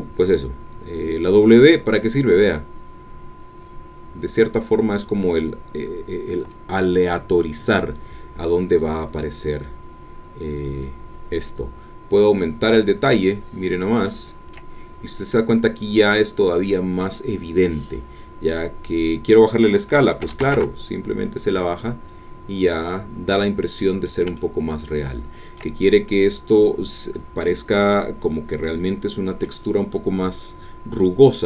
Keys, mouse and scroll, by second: 1.3-6.6 drag, 10.8-12.6 drag, 13.3-14.7 ctrl+middle drag, 18.8 click, 20.2 KP_5, 20.4 KP_0, 20.5 KP_Enter, 21.8-22.6 scroll down 4, 22.8-24.2 middle drag, 24.3-25.7 ctrl+middle drag, 26.6 click, 27.5 middle click, 28.6-31.3 middle drag.